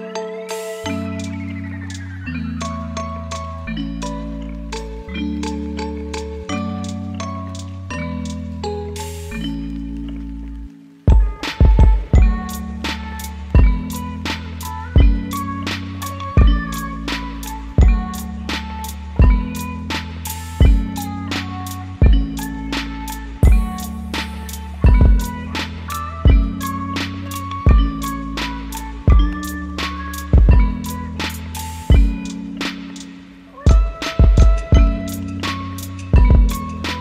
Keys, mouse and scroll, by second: 3.2 ctrl+alt+y, 5.3-7.7 typing, 17.0-17.5 typing, 17.8 Return, 22.2-22.9 typing, 26.3 u.